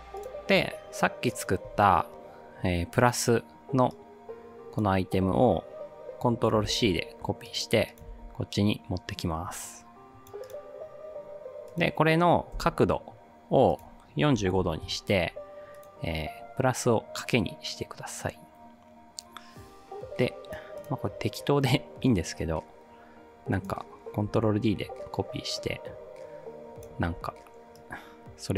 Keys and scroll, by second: 6.7 ctrl+c, 8.1 ctrl+v, 12.5 r, 14.2-15.1 typing, 24.3 ctrl+d, 27.1 ctrl+d.